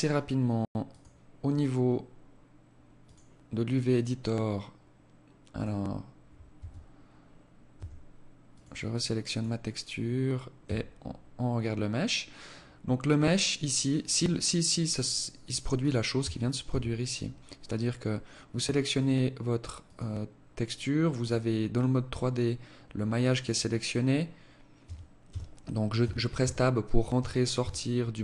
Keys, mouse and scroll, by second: 20.8 click, 23.9 Tab, 24.3 Tab, 25.0 Tab, 25.6 Tab, 26.2 Tab, 26.7 Tab.